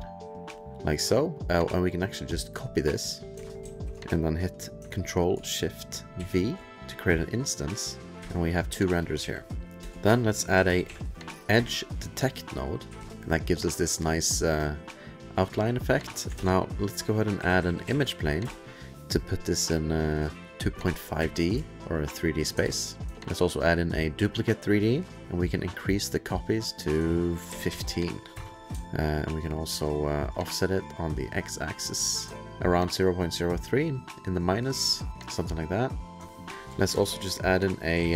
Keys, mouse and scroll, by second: 0.5 click, 1.3 click, 3.6 ctrl+c, 4.3 click, 8.0 click, 8.2 ctrl+shift+2, 9.0 click, 9.2 ctrl+f, 9.3 ctrl+click, 9.4 ctrl+click, 9.8 click, 9.8-11.5 typing, 11.5 Return, 12.8 2, 14.8 click, 16.3-18.5 typing, 20.1 click, 21.1 2, 21.7-22.2 alt+scroll, 22.6 ctrl+alt+s, 22.9-23.7 typing, 24.8 click, 25.2 click, 25.2 2, 26.8 click, 27.5 ctrl+a, 27.5 KP_1, 27.7 KP_5, 28.3 KP_Enter, 28.8 alt+middle click, 29.2-30.3 alt+scroll, 31.4 click, 32.3-33.0 ctrl+click, 32.8 ctrl+click, 33.7 ctrl+click, 33.8 ctrl+click, 33.8-34.5 ctrl+click, 34.0 ctrl+click, 35.2-38.1 ctrl+click, 35.5 alt+middle click, 35.8 alt+middle click, 36.0-36.5 alt+scroll, 36.5 ctrl+z, 36.5 click, 36.5-38.1 typing.